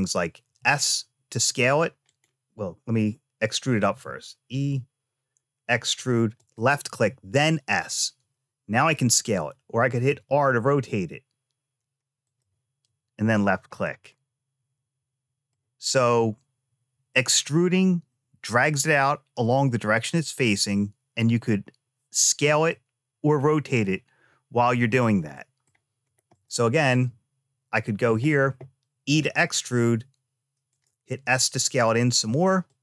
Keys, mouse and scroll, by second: 3.7 e, 7.2 s, 12.0 r, 13.1 click, 13.6-15.3 middle drag, 22.5 middle click, 23.6 middle click, 25.1 middle click, 26.1 click, 26.8-27.9 middle drag, 28.8 e, 30.9 s.